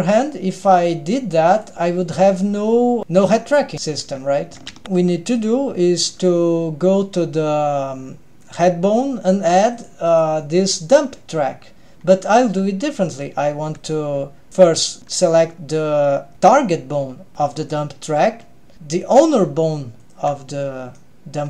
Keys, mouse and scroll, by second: 0.6 drag, 1.7 click, 3.7 click, 4.8 ctrl+alt+shift+super+r, 5.3 click, 9.4 click, 9.7 click, 10.1-11.9 drag, 12.3 drag, 13.8 click, 19.6 shift+drag, 20.6-21.2 middle drag.